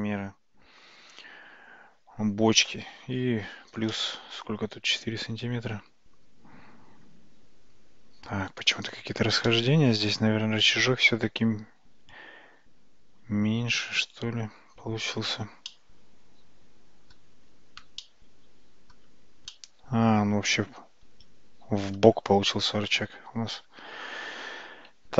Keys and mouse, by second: 4.0-4.4 shift+middle drag, 9.6-10.3 shift+middle drag, 15.7-17.2 middle drag, 18.1-19.0 shift+middle drag, 19.6-22.0 middle drag, 23.6 ctrl+z, 23.9 ctrl+z, 24.2 ctrl+z, 24.5 ctrl+z, 25.0 ctrl+z.